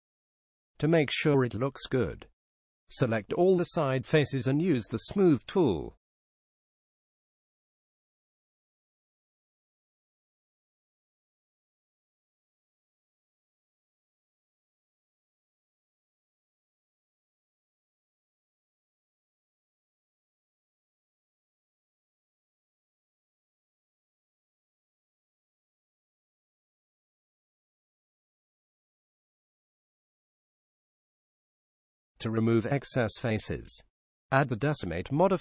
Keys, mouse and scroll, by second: 6.0-7.8 middle drag, 12.4-14.4 drag, 16.2-18.1 drag, 30.8-35.0 drag.